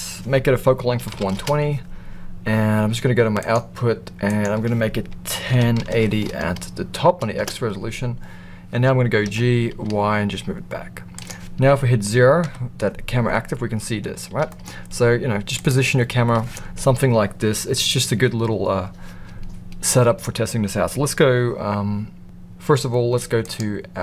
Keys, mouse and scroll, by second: 3.3 click, 4.2-8.1 drag, 9.2 g, 12.4 KP_0, 14.4 g, 23.4 click.